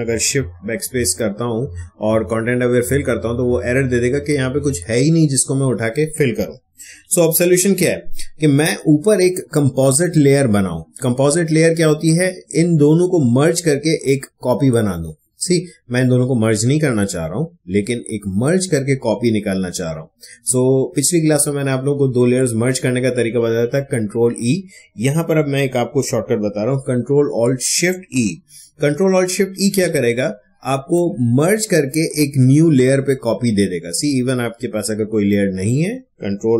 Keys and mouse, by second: 0.3 shift+BackSpace, 2.2 Return, 5.3 Escape, 6.8 ctrl+d, 29.2 ctrl+alt+shift+e, 33.9-36.5 drag.